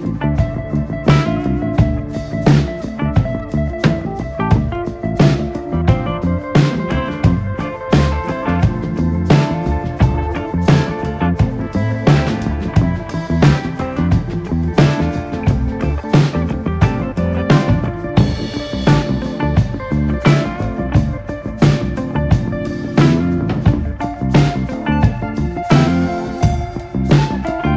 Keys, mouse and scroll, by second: 0.1 alt+/, 0.3 scroll up 3, 0.5-1.5 drag, 2.2 click, 3.2 s, 5.2 click, 6.0 Tab, 6.1 click, 6.3 scroll down 2, 6.5 alt+/, 6.9-7.7 scroll up 1, 7.7 drag, 8.3 scroll up 1, 8.5-8.9 shift+middle drag, 8.9 Tab, 9.2 a, 13.1 scroll up 1, 13.3 s, 15.1 Tab, 15.3 click, 15.5 scroll down 2, 15.6-16.3 shift+middle drag, 16.3 shift+drag, 16.9 shift+click, 17.3 /, 17.9 KP_3, 18.4 click, 19.8-20.8 middle drag, 20.8 KP_3, 21.4 shift+middle drag, 21.6 scroll up 1, 21.9-22.3 shift+middle drag, 22.3 click, 22.7 r, 23.7 click, 24.2 click, 24.3 scroll down 3, 24.4-25.0 middle drag, 25.0 click, 25.6 click, 26.3 KP_3, 26.6-27.0 scroll up 2, 27.0 r.